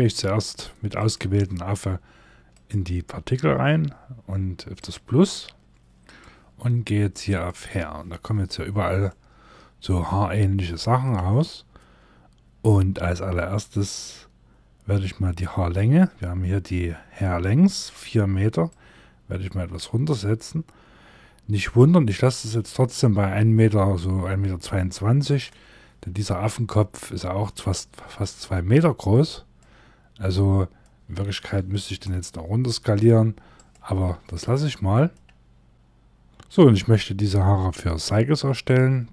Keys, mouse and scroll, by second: 0.5 click, 2.1 click, 5.8 click, 6.8 click, 8.0 scroll down 1, 8.6 middle click, 18.2 click, 25.7 middle click, 27.4 scroll up 2, 28.5 scroll down 1, 29.1 middle click, 31.4 scroll up 1, 31.4 s, 33.8 middle click.